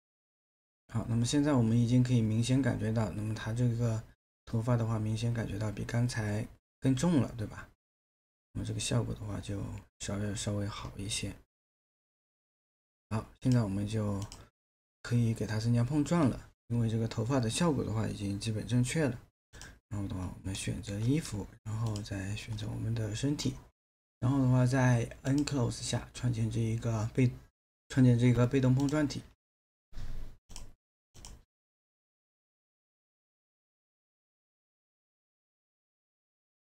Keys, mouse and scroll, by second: 20.6 alt+middle click.